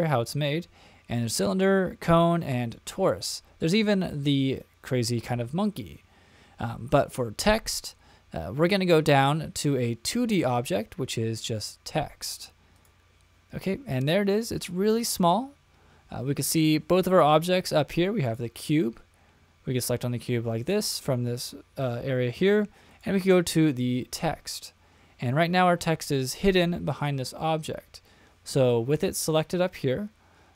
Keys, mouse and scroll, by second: 18.2 click, 22.9 click.